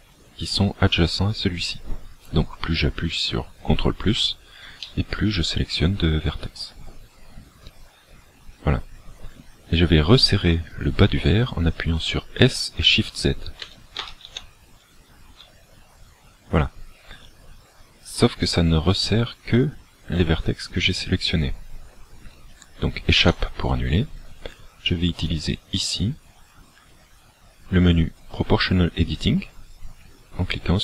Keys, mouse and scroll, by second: 4.9 middle click, 13.7 s, 25.3 click.